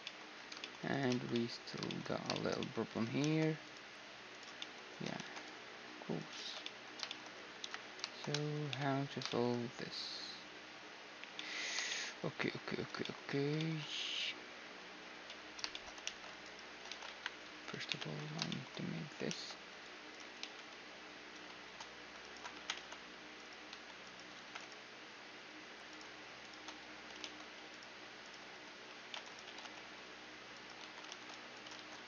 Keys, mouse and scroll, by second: 0.6-2.4 right drag, 1.0 Tab, 1.9-4.0 middle drag, 2.8 ctrl+r, 4.2-6.1 middle drag, 4.8 ctrl+r, 6.1 ctrl+z, 6.3-8.6 middle drag, 7.3 KP_1, 8.3 ctrl+KP_3, 8.9-16.7 middle drag, 15.7 ctrl+r, 16.1-18.9 right drag, 16.5 ctrl+z, 16.7 click, 16.7 KP_1, 17.5 ctrl+KP_3, 18.9 ctrl+r, 18.9-20.2 middle drag, 20.0 ctrl+z, 21.8-30.3 right drag, 22.4 g, 23.3 a, 24.0 g, 26.8 ctrl+z, 28.6 c, 28.8-30.7 middle drag, 29.1 g, 30.7 ctrl+r, 30.7-31.4 typing, 31.1-32.0 drag, 31.1-32.0 right drag, 31.4 ctrl+z, 31.6-32.0 middle drag.